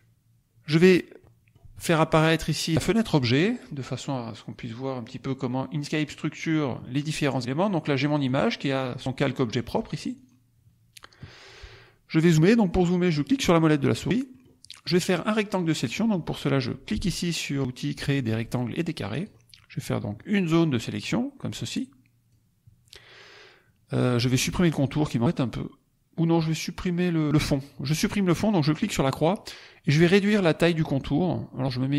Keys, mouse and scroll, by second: 1.1-1.7 middle drag, 2.3 click, 3.1 click, 4.9-6.2 drag, 8.2 click, 10.2 click, 13.2 middle click, 13.2-13.5 scroll up 1, 13.9 middle click, 14.4 middle click, 19.0 click, 20.1-22.4 drag, 28.7 click.